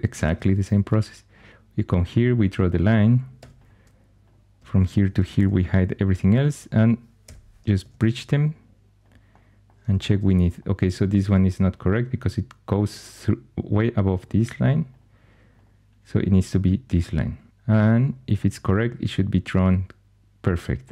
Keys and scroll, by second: 0.2 shift+a, 3.3 2, 5.3 shift+h, 5.9 1, 7.2 |, 7.7 Tab, 7.9 Tab, 17.5 alt+h.